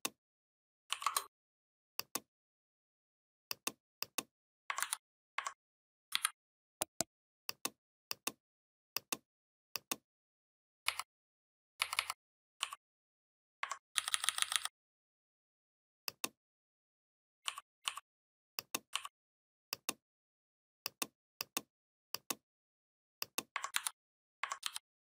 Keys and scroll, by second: 4.6 ctrl+c, 5.9 ctrl+b, 10.7 Down, 13.8 ctrl+[, 23.6 ctrl+c, 24.4 ctrl+f.